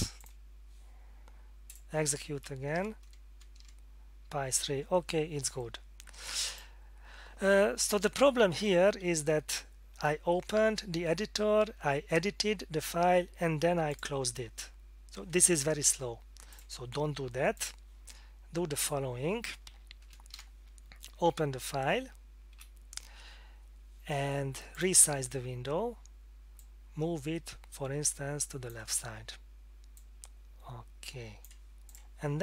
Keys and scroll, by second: 3.6 Return, 9.9 F4, 20.0 F8, 20.3 Return, 22.6 F4.